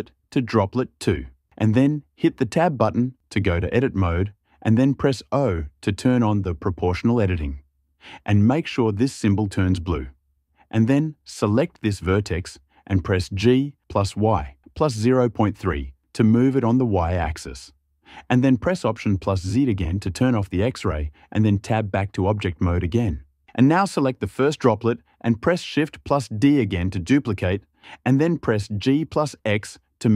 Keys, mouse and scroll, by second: 2.1 Tab, 10.8 click, 13.2-15.3 typing, 16.2 Return, 18.6 alt+z, 21.3 Tab, 24.4 click, 26.4 shift+d, 28.2 g, 28.6 x.